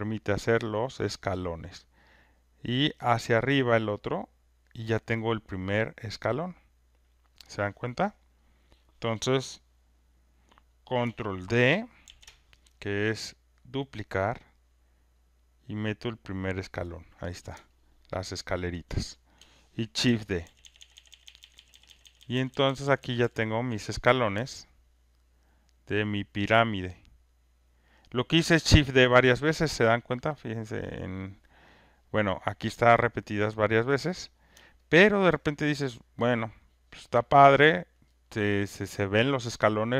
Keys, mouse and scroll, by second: 1.1 click, 4.6 click, 7.4 click, 8.8 click, 12.0 ctrl+d, 14.4 click, 16.4 click, 18.7 alt+click, 20.0-23.1 typing, 23.1 alt+click, 28.3-33.2 alt+drag, 37.2 alt+click, 37.9 alt+right click, 38.2 alt+middle click.